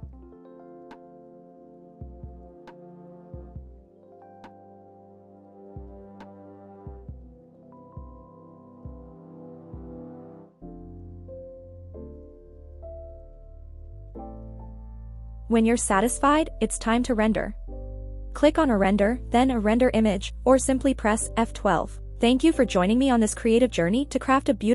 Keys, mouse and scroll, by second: 1.0-2.3 drag, 3.6 g, 6.3 click, 7.1 KP_0, 12.4 click, 13.8 click, 14.5 click, 15.6 g, 15.8 z, 17.4 click, 17.8-18.2 scroll down 2, 19.0-19.5 scroll up 2, 19.5-19.9 scroll down 2, 19.9-20.3 scroll up 2, 20.8 scroll down 1, 22.9 drag.